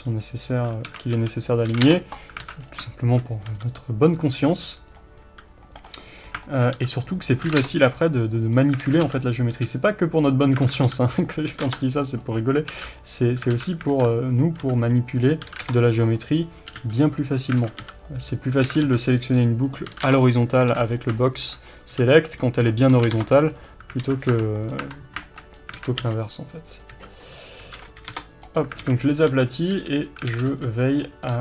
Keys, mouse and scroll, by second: 0.5 click, 0.7 scroll down 1, 0.9 alt+a, 1.4 b, 2.2 click, 2.4 alt+a, 2.6-4.9 scroll down 1, 4.9 b, 5.9 right click, 6.3 scroll up 1, 6.5-8.1 shift+middle drag, 7.1 b, 8.1 click, 8.6 scroll up 1, 8.9 alt+a, 9.2 b, 10.7 alt+a, 12.7 alt+z, 13.6 alt+a, 14.0 alt+z, 15.2 b, 16.2 click, 16.7 g, 17.5 click, 17.6 alt+a, 18.0 b, 18.7 alt+a, 19.7 b, 20.6 click, 20.7 alt+a, 20.9-21.2 scroll down 1, 21.2-23.7 shift+middle drag, 21.7-22.4 scroll up 1, 22.4 b, 23.7 click, 24.1 alt+a, 24.3 scroll down 1, 24.4 Tab, 24.8 scroll up 1, 24.9 Tab, 25.3-28.8 shift+middle drag, 25.6 scroll up 1, 25.8 alt+a, 28.8 alt+a, 29.1 scroll up 1, 29.6 b, 30.3 alt+a, 31.1 b.